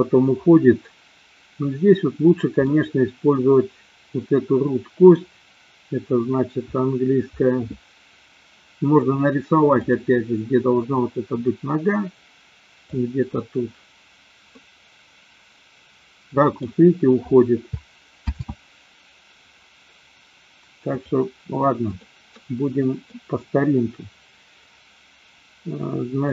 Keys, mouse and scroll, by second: 2.7-5.2 middle drag, 12.9 click, 14.4-16.6 middle drag, 18.8 ctrl+z, 20.9 click, 21.9 click, 22.4-23.2 middle drag.